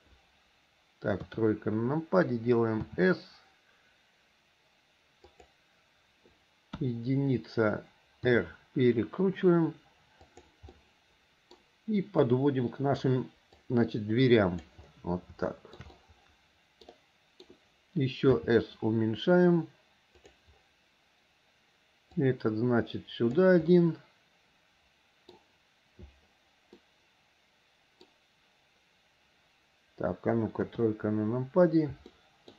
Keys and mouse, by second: 1.3 KP_3, 3.0 s, 6.9 KP_1, 8.4 r, 10.9 middle click, 12.4 click, 13.8-14.8 drag, 15.6 shift+middle click, 16.1 middle click, 17.1 middle click, 18.5 s, 22.3-23.6 drag, 23.9-25.5 middle drag, 27.0-28.2 middle drag, 30.8 KP_3, 32.3 shift+click.